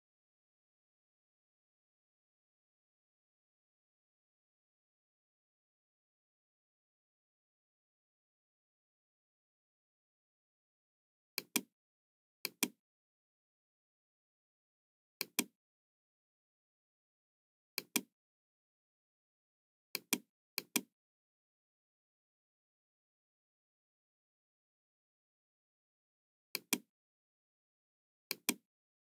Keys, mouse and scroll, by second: 1.6-2.0 scroll up 2, 11.3 click, 12.3 click, 15.2 click, 17.7 click, 19.8 click, 20.5 click, 25.1 Return, 25.1 KP_0, 25.1 KP_5, 26.5 click, 28.2 click.